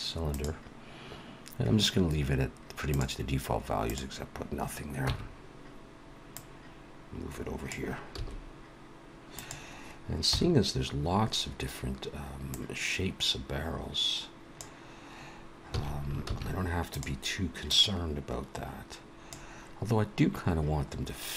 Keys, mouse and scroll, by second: 2.9 click, 4.3 click, 5.0 Tab, 6.3 click, 8.1 s, 10.2 KP_1, 12.5 click, 16.0 s, 17.6 click.